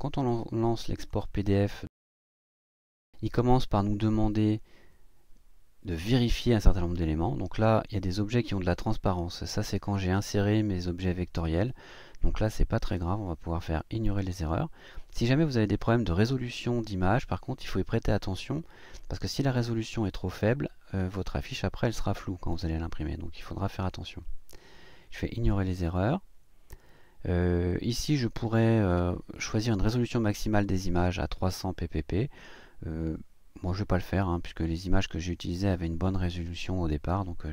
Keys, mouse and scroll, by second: 0.9 click, 2.3-3.1 drag, 25.1 click.